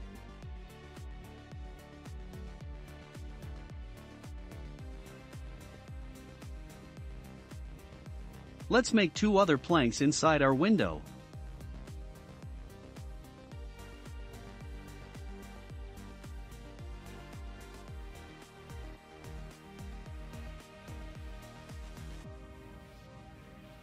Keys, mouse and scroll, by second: 3.7 click, 4.1-5.1 scroll down 6, 4.7-6.9 shift+middle drag, 6.9 scroll up 2, 8.7 shift+a, 10.3 click, 10.8 scroll down 2, 11.2-15.4 middle drag, 12.3 shift+d, 15.5-17.2 drag, 17.2-17.6 scroll up 2, 17.6-20.0 middle drag, 20.0 s, 23.0 s.